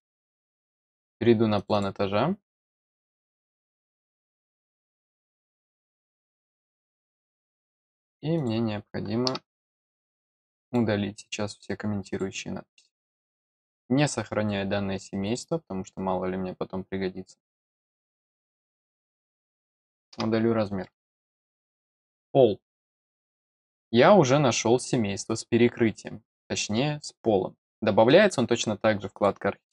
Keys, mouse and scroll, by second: 0.8 click, 1.5 click, 3.7-4.2 scroll up 2, 5.7 middle click, 6.8 scroll down 1, 7.3 middle click, 8.3 click, 10.6 click, 12.0 click, 13.2 click, 15.2 click, 19.2 click, 20.8 middle click, 21.5-22.3 scroll up 2, 29.1 click.